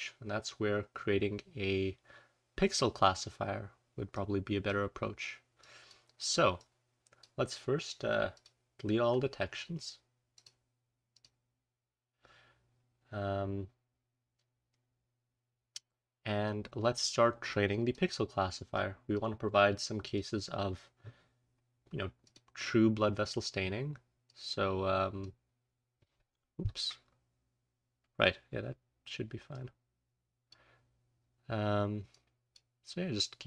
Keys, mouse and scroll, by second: 2.5-2.9 scroll down 1, 5.5 click, 8.3 click, 11.7-12.6 scroll up 1, 12.6-13.5 scroll down 1, 13.5-15.5 scroll down 1, 15.5-16.5 scroll down 1, 16.5-17.5 scroll down 1, 18.3-19.1 scroll up 1, 18.7-19.1 drag, 20.0 click, 22.0-25.0 scroll up 1, 22.2 click, 24.2-25.5 drag, 25.0-26.8 scroll up 1, 26.8-28.4 scroll up 1, 29.4 click, 30.5 scroll up 1, 30.7-31.1 scroll down 1, 31.1-32.0 scroll up 1, 32.0 click, 33.2 click.